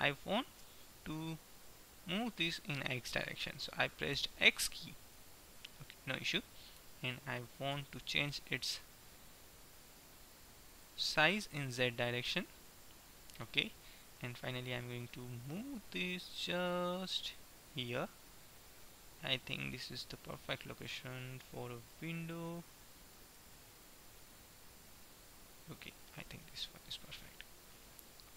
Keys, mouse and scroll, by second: 7.8 s, 11.3-13.2 middle drag, 12.7 KP_1, 14.2 g, 19.2-20.8 middle drag, 23.2-25.7 drag, 26.2 click, 26.3-28.2 middle drag.